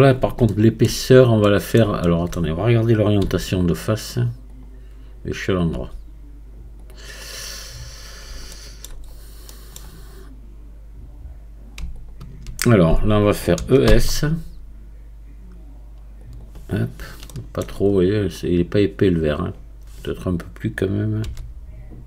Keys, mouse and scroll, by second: 0.5-3.2 shift+middle drag, 3.2 q, 7.7-8.4 scroll up 1, 8.4 shift+scroll up 1, 8.5 shift+middle click, 9.1 scroll up 1, 9.5-12.0 middle drag, 12.0-13.6 alt+drag, 13.6 e, 16.7-17.3 scroll down 2, 17.3 shift+middle click, 17.9-19.3 scroll up 2, 19.3-20.9 scroll up 1.